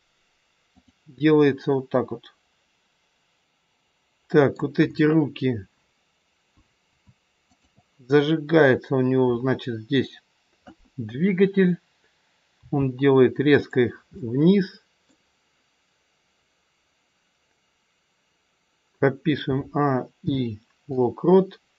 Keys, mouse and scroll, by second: 0.7 click, 3.4 middle click, 7.4 shift+click, 12.6 g, 14.2 middle click, 19.4 a, 20.2 i.